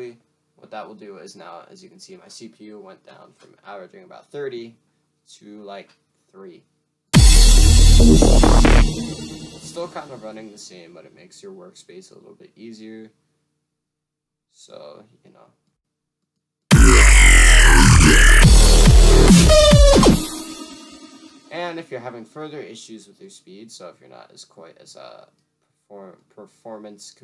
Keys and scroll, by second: 1.1 F1, 1.4 F1, 1.8 F1, 3.2 F1, 3.8 F1.